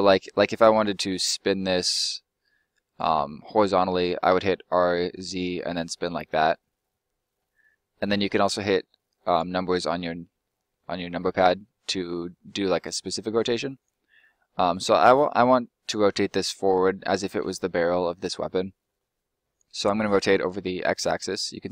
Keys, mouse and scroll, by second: 3.6 middle click, 5.1 z, 9.2 right click, 10.3 middle click, 13.4 click, 14.0 middle click, 14.7 click, 17.4 middle click.